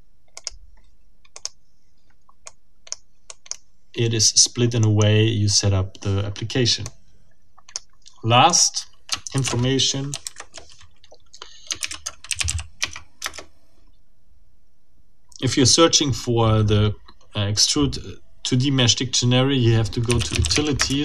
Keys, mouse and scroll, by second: 0.3 click, 1.3 click, 2.4-3.1 drag, 3.3 click, 4.8 click, 6.8-7.9 drag, 8.5 click, 9.4 ctrl+alt+t, 10.2 ctrl+alt+Right, 12.2 ctrl+f, 12.4 ctrl+o, 12.5 ctrl+d, 12.8 ctrl+Tab, 13.2 ctrl+Return, 19.8-21.0 typing.